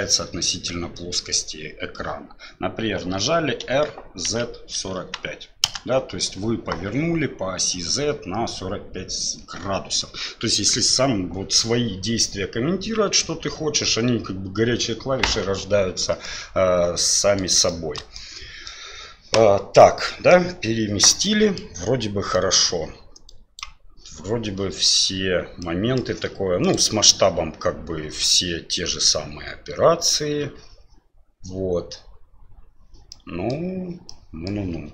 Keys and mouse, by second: 3.6 r, 16.2-17.4 middle drag, 17.7 shift+middle drag, 18.1-18.7 middle drag, 19.8-20.3 middle drag, 21.2-21.6 middle drag, 22.3 middle click, 23.3 click, 25.6 middle click, 33.1-33.5 middle drag, 34.1-34.5 middle drag.